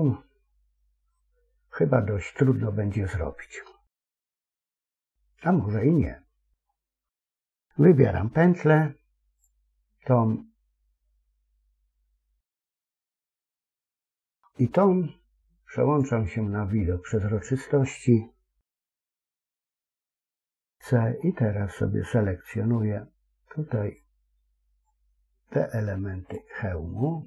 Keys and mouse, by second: 3.9 shift+middle click, 9.2 alt+shift+click, 15.9 click, 18.7 x, 20.5 c.